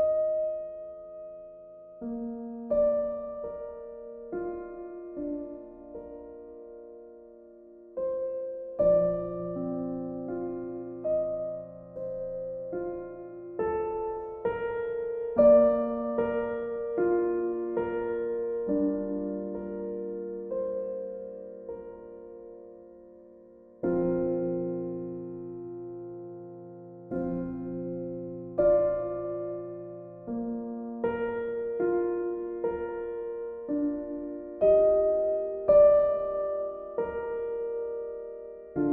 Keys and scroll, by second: 2.2 b, 4.3 ctrl+z, 17.8 ctrl+z, 34.1 ctrl+u.